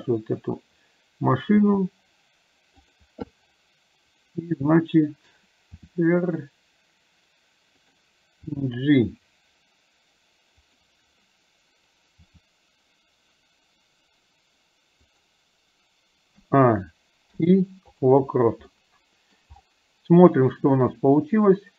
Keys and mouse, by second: 1.8 r, 8.7 g, 18.7 middle click, 21.5-21.7 drag.